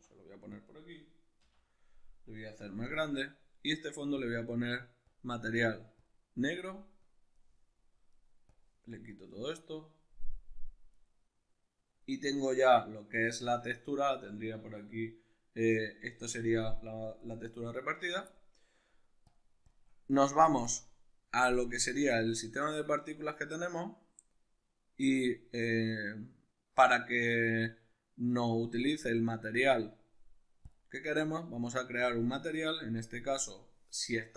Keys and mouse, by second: 0.6 click, 2.6 s, 3.0 right click, 3.3 click, 5.1-7.0 drag, 8.5-11.0 drag, 11.0 right click, 17.2 right click, 19.3 click, 20.6-30.7 middle drag, 30.7 click, 32.0-34.3 drag.